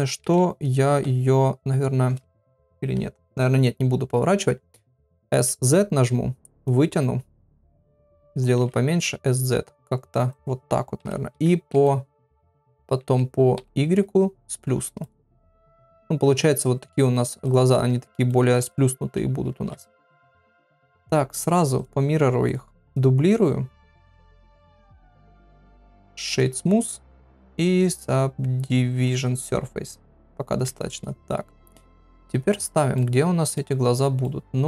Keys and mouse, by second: 0.0 r, 5.1 s, 7.3 middle click, 7.8 s, 8.6 s, 11.0 KP_7, 11.3 s, 13.0 s, 15.8 r, 16.6 g, 17.4 click, 17.7 middle click, 18.6 click, 19.5 ctrl+a, 20.9 click, 24.4 click, 25.0-26.4 right drag, 27.1 click, 30.6 KP_3, 31.6 g, 32.9 middle click, 34.2 middle click.